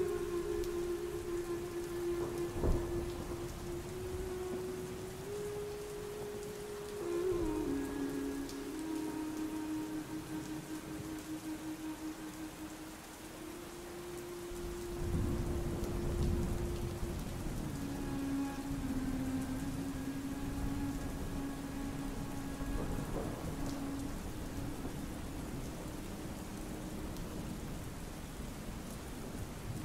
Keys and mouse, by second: 0.2 middle click, 0.8 shift+middle click, 1.6-2.0 drag, 2.0 Tab, 4.5 click, 6.9 Tab, 8.3 shift+middle click, 9.3 click, 9.9 middle click, 10.6-11.8 drag, 13.4-14.8 drag, 16.0 ctrl+s, 16.1 shift+middle click, 17.7 middle click, 17.8 a, 18.0 x, 18.4 ctrl+v, 18.8 shift+middle click, 19.2 shift+middle click, 20.0 click, 20.9 middle click, 21.1 middle click, 21.4 middle click, 23.0 middle click, 23.6 middle click, 24.1 middle click, 24.5-26.4 drag, 26.6 middle click, 27.2 click, 29.1 a, 29.5 ctrl+c.